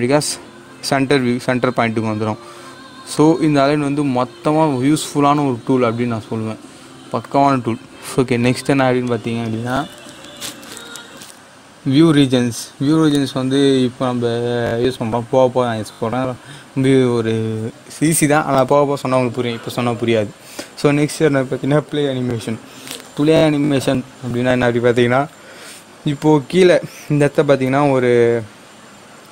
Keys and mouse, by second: 3.0-9.1 drag.